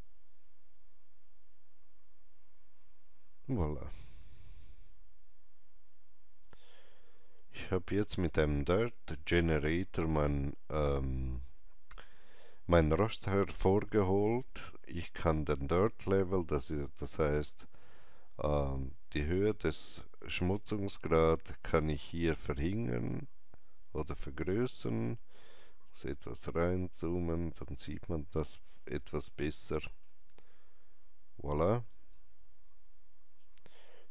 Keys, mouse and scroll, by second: 1.4 click, 4.4 alt+right click, 4.6 alt+right click, 18.7-29.4 drag, 18.7 alt+right click, 24.8 alt+right click, 26.7 alt+middle click, 29.2 alt+middle click, 29.4 alt+middle click, 30.3-34.1 alt+drag, 32.0 alt+right click.